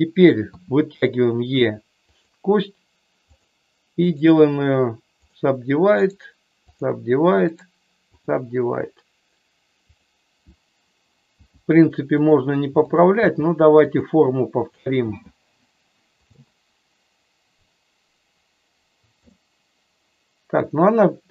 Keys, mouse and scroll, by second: 0.5 e, 2.0 click, 3.3 click, 4.2-5.4 right drag, 6.2 right click, 7.6 right click, 9.9 click, 11.3 g, 12.1 click, 12.8 click, 13.2 g, 13.8 click, 15.0 g, 16.1 click, 19.2 click.